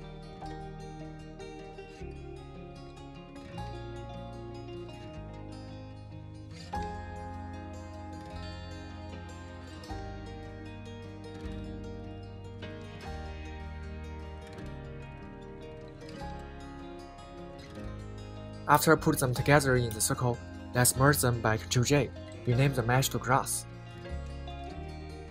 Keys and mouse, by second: 0.2 click, 0.3-1.4 middle drag, 1.6-2.3 middle drag, 2.5 KP_1, 3.2-4.6 middle drag, 5.1-5.5 middle drag, 5.7 KP_3, 6.0 g, 6.2 z, 6.8-7.4 middle drag, 7.5-8.6 middle drag, 8.7 KP_1, 8.9 KP_3, 9.3 middle click, 9.6 KP_3, 10.3 s, 10.9-11.5 drag, 12.0-12.8 middle drag, 16.1 click, 17.0 click, 17.5-18.7 middle drag, 25.2 ctrl+j.